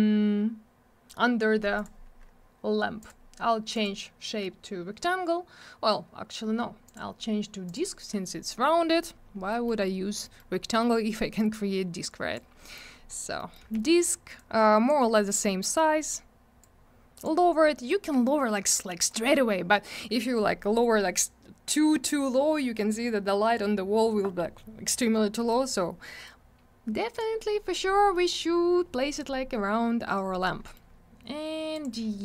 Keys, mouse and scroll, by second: 1.8 click, 1.8 click, 3.0 click, 3.1 click, 3.7 click, 3.8 click, 6.9 click, 7.0 click, 7.7 click, 7.7 click, 8.5 middle click, 8.7 middle click, 8.8-9.2 scroll up 1, 9.5 middle click, 9.7 middle click, 9.8 scroll up 1, 10.3 middle click, 10.4 middle click, 10.5 scroll up 1, 10.8 middle click, 10.9 middle click, 11.4 click, 12.6 middle click, 12.8 middle click, 12.9 scroll down 1, 13.4 middle click, 13.6 middle click, 13.6 w, 14.4 click, 15.0 scroll up 1, 15.6 middle click, 15.8 middle click, 15.9 scroll up 1, 16.6 click, 17.8 middle click, 17.9 middle click, 18.8 click, 25.4 middle click, 25.5 middle click, 26.3 click, 28.0 middle click, 28.1 middle click, 30.7 middle click, 30.7 middle click, 31.8 click, 31.8 click.